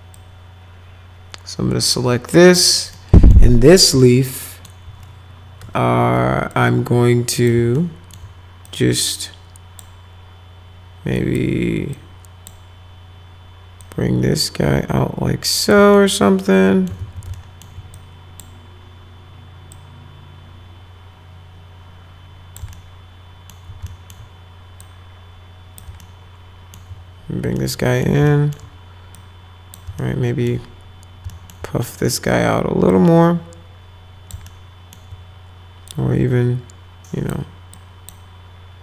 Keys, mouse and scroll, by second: 0.1-2.5 drag, 2.9 middle click, 4.0 alt+middle click, 5.6 1, 6.5 click, 7.7 alt+middle click, 8.6-9.8 drag, 11.2 click, 11.9 click, 13.8-15.7 drag, 15.9 alt+middle click, 17.0 ctrl+z, 17.4 alt+middle click, 18.0 click, 19.7-22.6 drag, 22.7 alt+middle click, 23.9 alt+middle click, 24.8 click, 26.0 alt+middle click, 27.6 alt+middle click, 28.3 alt+right click, 29.2 click, 30.0 alt+right click, 31.3 alt+middle click, 32.9-34.3 drag, 34.5 alt+middle click, 35.9-37.3 drag, 37.7 click.